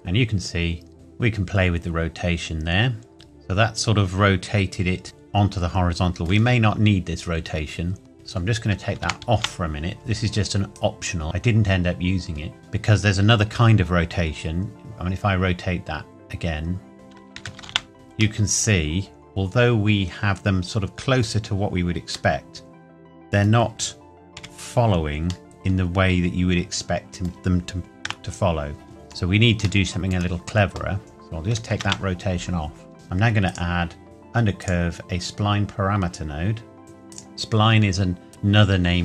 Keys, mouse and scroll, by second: 3.1 middle click, 8.1 click, 9.0 KP_0, 9.3 KP_Enter, 10.8 click, 16.9 click, 17.4 KP_9, 17.6 KP_0, 17.6 KP_Enter, 18.4 middle click, 24.4 KP_7, 25.4 middle click, 28.0 KP_0, 28.9-29.6 scroll down 1, 29.8 shift+middle click, 31.0 click, 31.7 KP_0, 31.8 KP_Enter, 32.8 scroll down 1, 32.9 Delete, 33.4 click, 37.1 click.